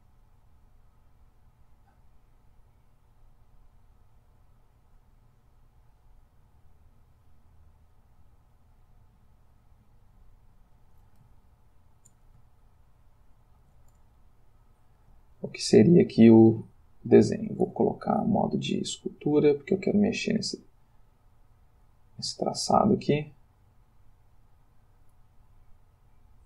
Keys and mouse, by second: 3.2-5.9 drag, 7.3-10.7 drag, 11.4-12.5 ctrl+middle drag, 12.6-14.0 shift+middle drag, 14.2-15.2 ctrl+shift+middle drag, 17.6 ctrl+Tab, 19.0 click, 20.0 f, 21.7 click, 22.6-25.3 drag, 25.9-26.4 drag.